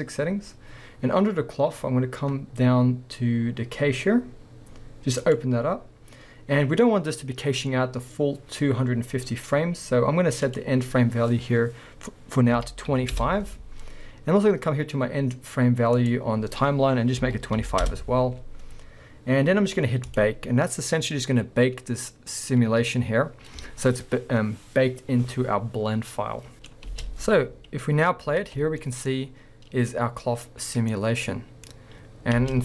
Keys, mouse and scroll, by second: 1.9-5.2 scroll down 2, 5.2-26.5 drag, 5.6-6.8 scroll down 2, 6.8 scroll down 1, 13.2 Return, 14.2 scroll down 1, 17.9 Return, 26.5 middle click, 26.8 space, 29.0-30.5 middle drag, 32.5 space.